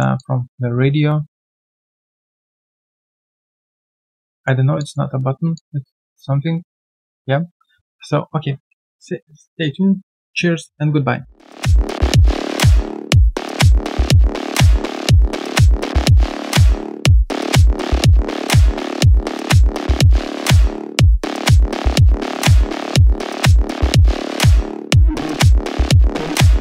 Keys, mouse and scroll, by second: 0.1 alt+click, 4.0 alt+right click, 4.3 alt+click.